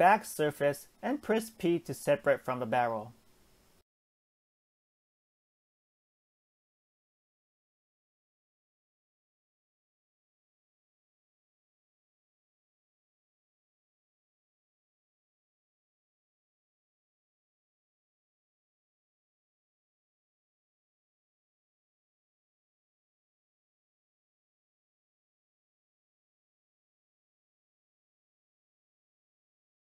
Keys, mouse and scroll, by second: 0.5 ctrl+click, 1.5 shift+d, 3.1 p, 4.1 Tab, 4.6 click, 5.4 g, 7.3 KP_1, 8.1 Tab, 8.5 a, 12.4 alt+z, 13.0-13.5 drag, 13.9 click, 14.6 g, 18.0 Tab, 19.4 Tab, 19.9-20.9 middle drag, 20.9-21.8 scroll up 1, 21.8-22.7 right drag, 22.7-24.2 middle drag, 24.2-24.9 drag, 25.8-29.8 drag.